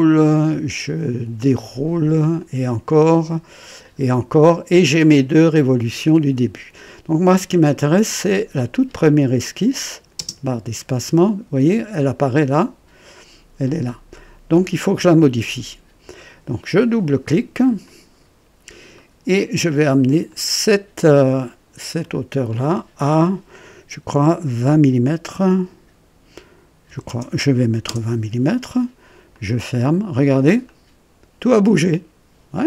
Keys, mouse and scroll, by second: 1.3 click, 2.3 click, 3.7 click, 8.0 click, 9.0 click, 10.2 space, 17.6 click, 18.9 right click, 20.3 click, 21.7 click, 26.8 KP_2, 27.0 KP_0, 27.8 Return, 28.8 typing, 29.3 click, 30.6-32.6 drag.